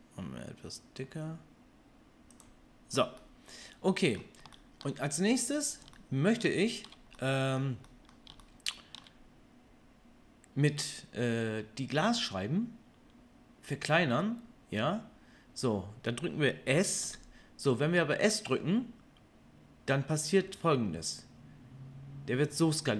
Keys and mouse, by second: 17.0 s.